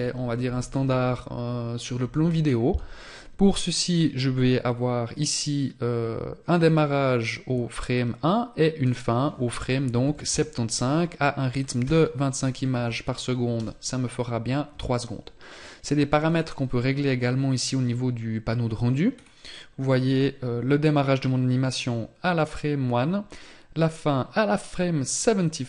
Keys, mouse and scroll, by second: 18.6 scroll down 1, 19.3 scroll down 1.